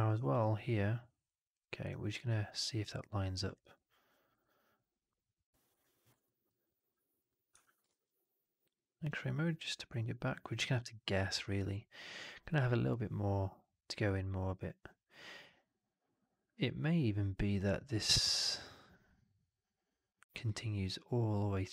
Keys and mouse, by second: 1.4 drag, 1.8 alt+drag, 6.1 alt+middle click, 6.5 alt+right click, 7.1 click, 7.4 1, 7.7 shift+x, 8.1 click, 10.7-21.7 drag.